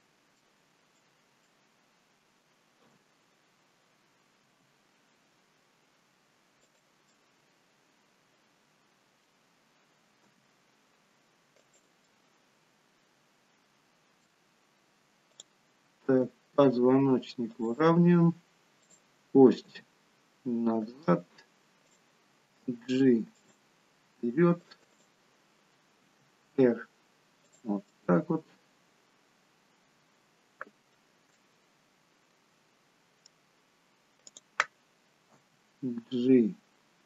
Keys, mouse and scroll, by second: 2.8 middle click, 2.8 KP_7, 4.5 r, 7.3 middle click, 10.3 g, 12.0 middle click, 15.3 click, 16.1 r, 18.8 click, 19.6 g, 22.5 click, 22.5 g, 25.6 click, 26.0 r, 27.8 middle click, 31.3 shift+middle click, 32.5 middle click, 34.2 click, 35.3 g.